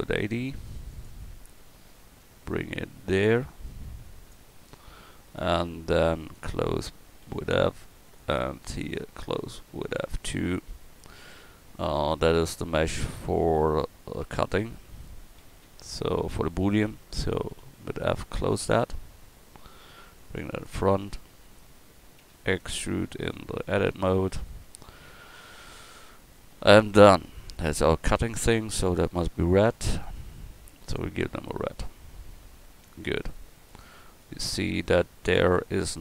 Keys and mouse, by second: 5.3-11.2 right drag, 7.2 f, 10.0 f, 14.2 Tab, 14.9 Tab, 15.4 a, 15.7 a, 17.5 f, 19.2 Tab, 20.2 click, 21.0 Tab, 22.2 e, 25.6 Tab, 28.1-31.5 drag, 33.9-36.0 middle drag.